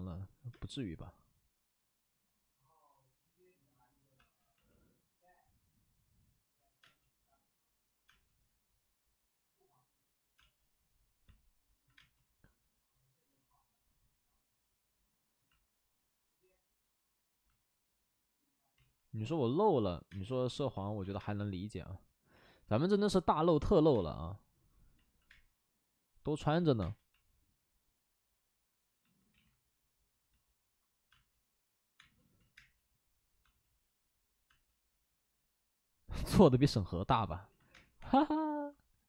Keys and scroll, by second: 0.5 space, 4.2 space, 6.8 space, 8.0 space, 10.3 space, 11.9 space, 18.7 ctrl+z, 20.0 space, 20.9 ctrl+z, 21.1 space, 22.7 space, 23.9 space, 25.2 space, 26.5 space, 29.3 ctrl+z, 31.1 space, 31.9 space, 32.3 ctrl+z, 32.5 space, 33.4 space, 34.4 space, 37.8 space, 37.9 3.